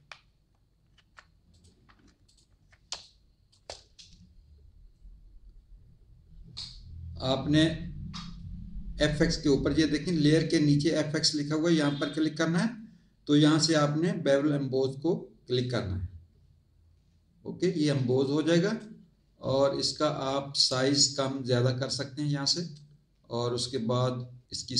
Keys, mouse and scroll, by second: 1.5 click, 2.2 alt+click, 2.9 space, 2.9 click, 11.8 click, 15.5 click, 18.1 click, 20.2 click, 21.8 click.